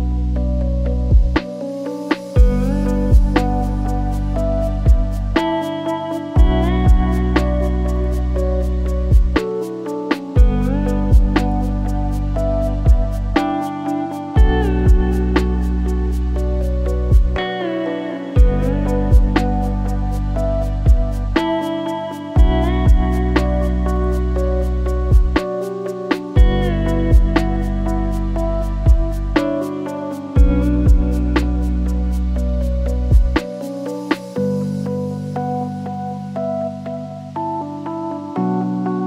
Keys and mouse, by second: 0.6-1.7 drag, 2.7 click, 3.2-7.9 drag, 9.5 click, 10.6 drag, 11.4-12.0 shift+drag, 12.9-13.2 shift+drag, 13.9 shift+d, 15.4 r, 18.9 click, 19.6 shift+middle drag, 19.9-20.3 drag, 20.3 s, 21.3 shift+d, 23.0 r, 25.5 r, 27.1 r, 28.5 s, 29.5 g, 32.0 r, 34.6 s, 36.8 click, 38.2-39.0 shift+drag.